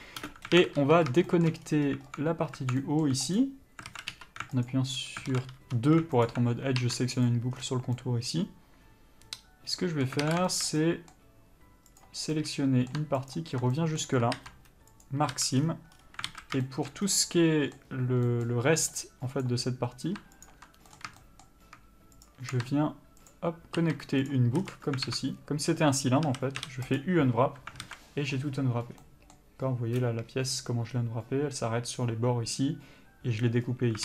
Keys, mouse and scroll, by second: 0.5 scroll up 1, 0.8 alt+a, 1.3 scroll up 1, 1.6 shift+middle click, 1.9-3.0 scroll up 1, 3.0 middle click, 3.6 alt+click, 4.1 alt+a, 4.9 alt+click, 5.5 alt+a, 5.8 2, 6.5 alt+click, 7.5 ctrl+e, 7.8 scroll down 1, 8.2 middle click, 10.5 alt+a, 10.7 shift+middle click, 11.0 middle click, 12.2 click, 12.6 middle click, 13.6 ctrl+click, 14.0 middle click, 15.3 ctrl+e, 15.6 a, 15.8-16.2 scroll down 1, 16.2-16.5 scroll up 1, 16.5 alt+a, 16.9 shift+middle click, 17.3 scroll down 1, 17.4 middle click, 19.0-19.6 scroll up 1, 19.6 click, 20.7 ctrl+click, 21.2 scroll down 1, 21.4 shift+middle click, 22.5 shift+click, 23.5 ctrl+click, 24.5 ctrl+e, 24.8 a, 26.5 a, 27.2 u, 28.1 alt+a.